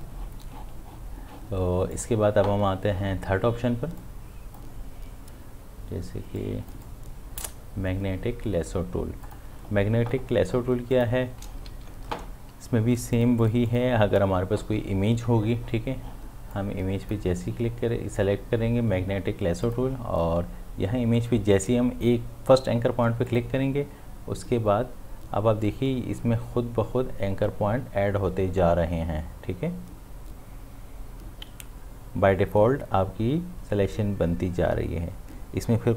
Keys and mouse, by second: 1.9-9.2 drag, 11.7 ctrl+z, 13.1 click, 16.5-19.4 drag, 19.7 click, 23.3 click.